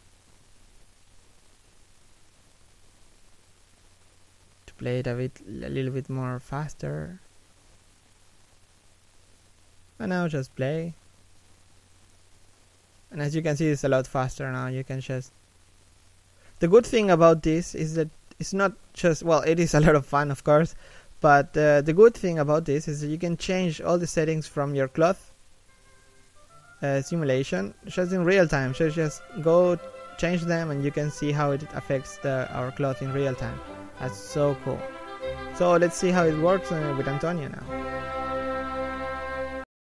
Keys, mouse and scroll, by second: 0.5 right click, 7.9 middle click, 8.7 right click, 8.8 g, 9.6 right click, 9.7 g, 11.9 right click, 12.2 g, 13.2 middle click, 13.7 g, 19.8 middle click, 20.2 g, 26.5 x, 29.2 g, 32.7 middle click, 33.2 g, 35.0 middle click, 35.5 scroll up 1.